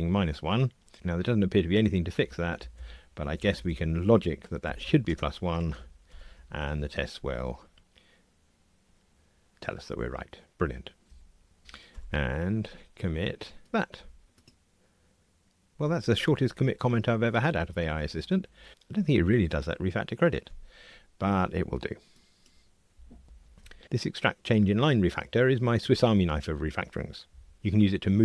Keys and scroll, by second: 0.9 alt+Return, 6.0 ctrl+r, 12.0 super+k.